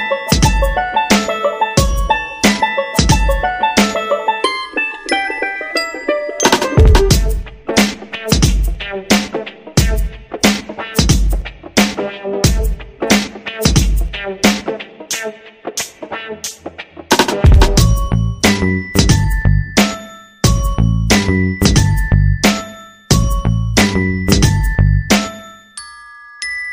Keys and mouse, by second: 0.4 shift+middle click, 1.1 alt+z, 1.7 right click, 2.3 alt+z, 2.7 shift+middle click, 3.4 c, 4.0 g, 5.3 r, 6.4 right click, 6.5 g, 7.4-8.5 right drag, 7.5 g, 10.0 alt+z, 10.4 right click, 10.5 g, 11.6 shift+middle click, 12.2 shift+middle click, 13.1 alt+z, 13.5 right click, 16.3 right click, 17.6 c, 20.7 x, 21.9 shift+middle click, 22.6 alt+z, 24.8 right click, 25.0 g, 26.4 right click, 26.5 g.